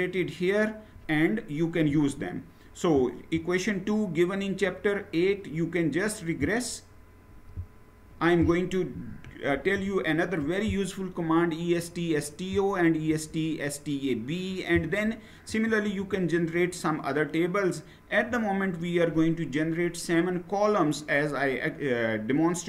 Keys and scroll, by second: 9.0 shift+Down, 15.2 Down, 15.5-17.7 Down, 21.4 Down.